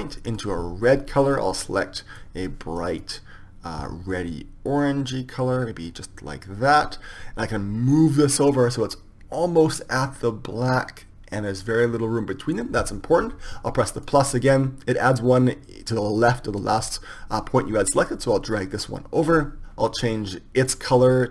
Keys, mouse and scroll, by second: 0.4-2.5 drag, 8.2-10.2 drag, 14.4-16.4 drag, 19.0 click, 21.1-21.3 drag.